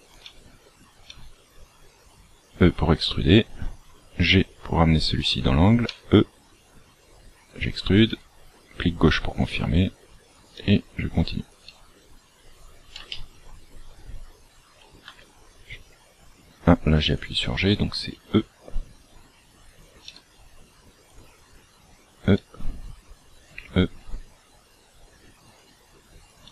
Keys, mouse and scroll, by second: 0.2 e, 3.9 g, 5.8 e, 8.0 e, 9.5 e, 10.5 e, 11.6 e, 13.0 shift+middle click, 15.0 g, 18.1 e, 20.0 e, 21.2 e, 22.3 e, 23.5 e, 26.4 e.